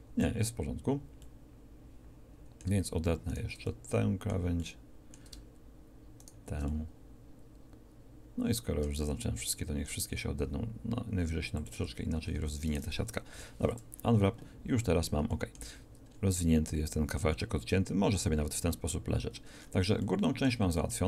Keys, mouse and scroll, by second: 9.5 ctrl+e, 12.2 a, 12.4 a, 13.3 u, 14.6 middle click.